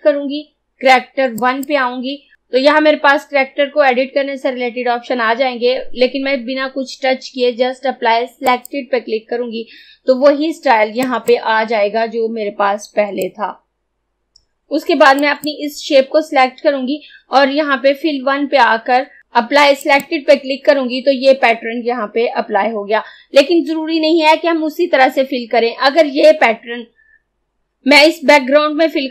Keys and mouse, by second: 8.5 click, 11.1 click, 19.2 click.